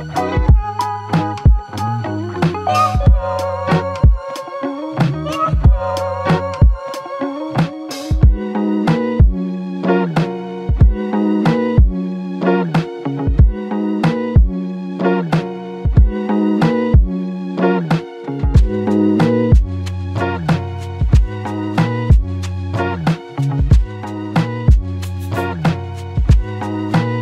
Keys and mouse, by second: 2.6 ctrl+click, 3.7 ctrl+click, 6.1 double click, 11.5 double click, 12.0 alt+click, 13.4 ctrl+z, 13.9 ctrl+z, 14.4 ctrl+z, 15.4 alt+click, 16.7 alt+click, 17.6 ctrl+click, 22.0 alt+click, 23.2 double click, 25.9 f, 26.1 alt+click, 26.9 alt+click, 26.9 ctrl+click.